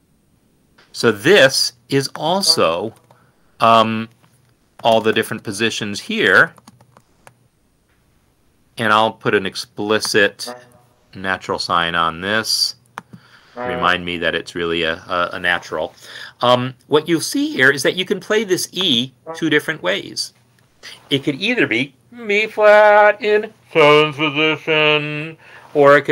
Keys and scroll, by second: 0.0-2.5 typing, 3.5 Escape.